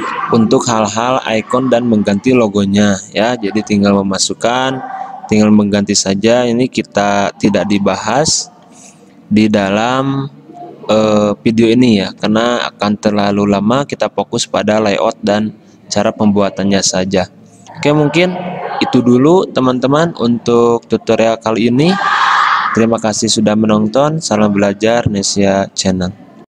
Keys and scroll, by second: 9.8 f, 10.2 f.